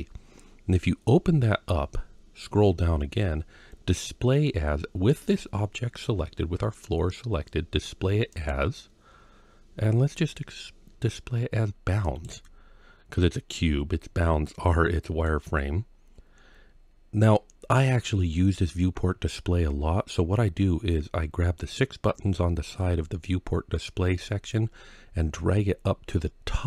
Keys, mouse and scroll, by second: 0.6 click, 1.4-3.6 scroll down 6, 4.9 click, 8.1-12.0 drag, 12.7 scroll down 1, 13.1-15.1 middle drag, 19.0-21.9 scroll up 2, 24.3-26.6 drag.